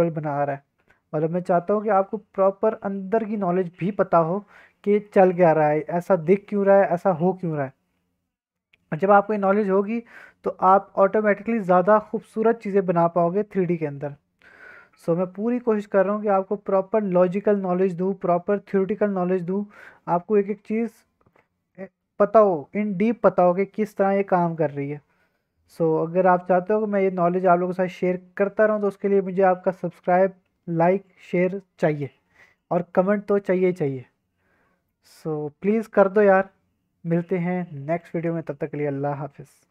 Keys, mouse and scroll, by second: 9.8-11.1 middle drag, 11.3-15.3 middle drag, 16.1 drag, 16.1 middle click, 16.9-21.3 drag, 21.7-22.0 middle drag, 22.2 scroll up 1, 23.5-23.8 middle drag, 24.0-24.5 middle drag, 25.3-26.2 middle drag, 26.2-27.7 drag, 28.2 drag, 29.6 click, 30.3-30.9 drag, 30.9-32.0 middle drag.